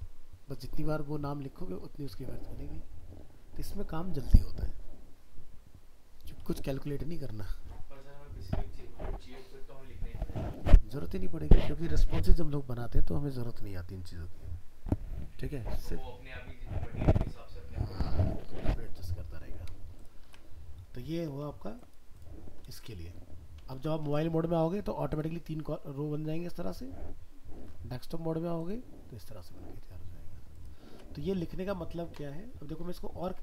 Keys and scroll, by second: 20.3 alt+Tab, 23.7 ctrl+s, 24.1 alt+Tab, 30.9 alt+Tab.